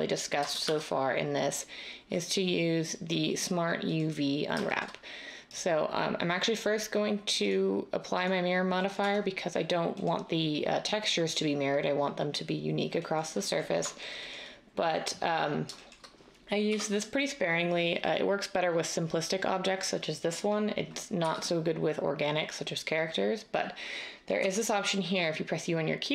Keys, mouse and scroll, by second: 0.6 Tab, 9.0 Tab, 16.6 u, 21.2 u, 24.4 u.